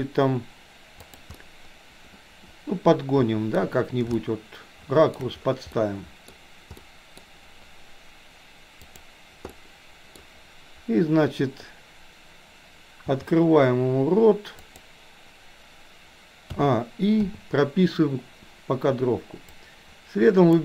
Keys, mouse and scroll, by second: 1.5-3.6 middle drag, 4.3-5.2 shift+middle drag, 5.7-6.3 middle drag, 6.8-7.2 middle drag, 8.8 click, 9.6-10.2 middle drag, 13.1 r, 16.6 a, 17.2 i, 19.6-20.6 drag.